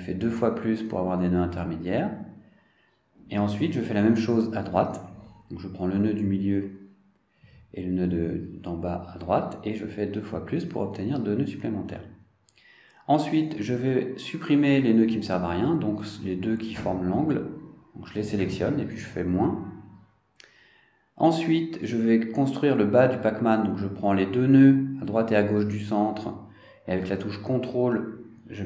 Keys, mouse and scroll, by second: 3.4 click, 3.9 click, 9.4 click, 10.6 shift+click, 12.7 click, 17.3 click, 18.5 shift+click, 22.0 click, 25.2 click, 27.6 shift+click.